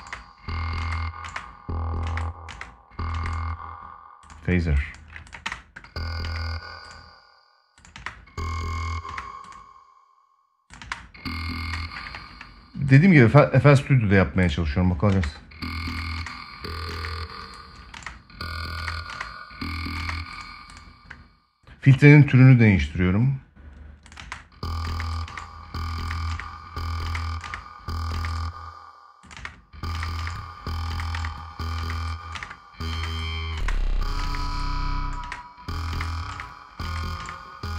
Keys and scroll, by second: 5.1 space, 7.6 space, 10.5 space, 11.8 ctrl+s, 14.8 space, 24.0 space, 29.1 space.